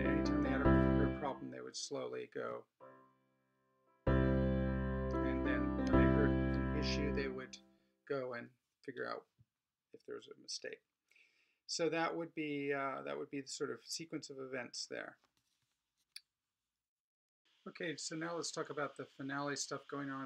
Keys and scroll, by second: 2.5 alt+space.